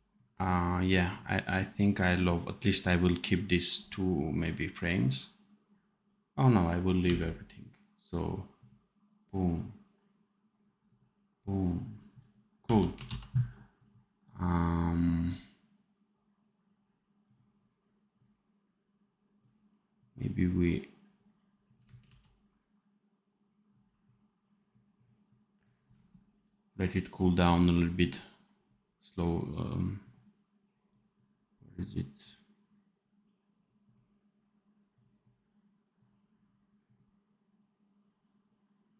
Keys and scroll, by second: 6.9 d, 12.5 d, 13.0 ctrl+s, 22.0 ctrl+c.